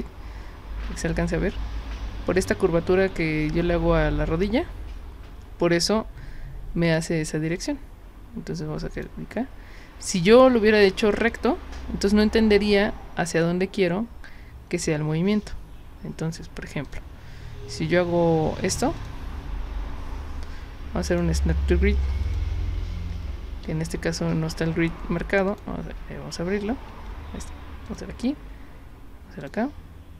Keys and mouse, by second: 6.9 click, 7.6 drag, 8.9 click, 10.1-14.8 drag, 15.3 z, 16.9 click, 19.0 click, 21.1 click, 22.3 click, 23.5 z, 25.5 click, 26.9 z, 27.9 click, 29.4 click.